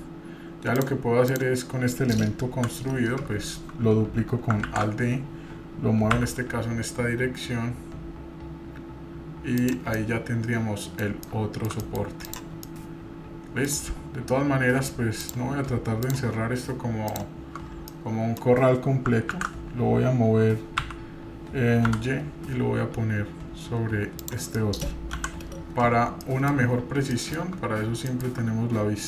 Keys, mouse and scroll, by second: 0.7 click, 0.7 scroll up 2, 1.3 click, 1.9 middle click, 2.4 KP_7, 3.0-3.4 scroll down 2, 3.3 scroll up 2, 4.6 alt+d, 10.0-11.0 middle drag, 11.2-11.7 shift+middle drag, 11.8-12.2 middle drag, 12.2 drag, 12.6-13.7 middle drag, 15.2 click, 16.0-17.6 shift+drag, 17.6 scroll down 2, 17.9 middle click, 19.3 alt+d, 24.6 middle click, 25.1 KP_7, 26.2-26.6 shift+middle drag, 26.6 scroll up 3, 27.1-27.5 shift+middle drag, 27.6 scroll up 2, 28.1 shift+middle drag.